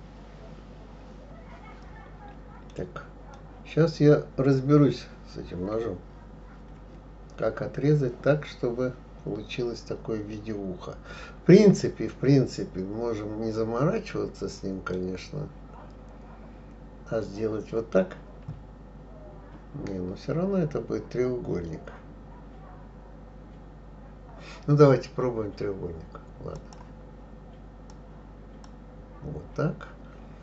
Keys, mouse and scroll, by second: 3.3-6.3 middle drag, 26.6 click, 27.9 click.